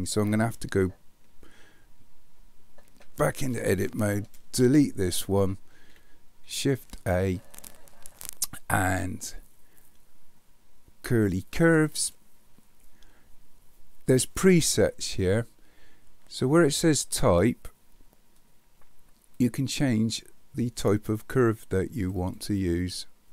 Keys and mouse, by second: 2.9 Tab, 4.6 Delete, 7.0 shift+a, 19.4 click, 22.2 click.